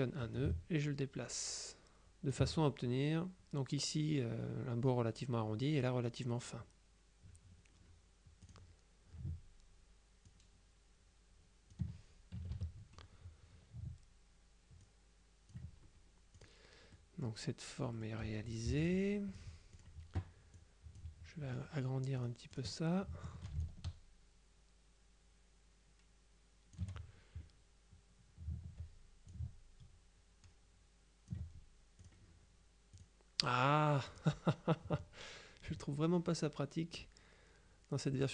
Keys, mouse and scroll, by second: 0.5-2.9 drag, 8.5 click, 10.3-12.3 ctrl+drag, 12.5 KP_Subtract, 14.9-16.1 ctrl+drag, 16.4 click, 17.0 middle click, 18.0 middle click, 18.8 F2, 18.9 click, 19.8 click, 20.6 click, 22.2 click, 23.7-27.4 ctrl+shift+drag, 29.4-31.9 ctrl+drag, 32.1 click, 33.0 click, 34.2 click.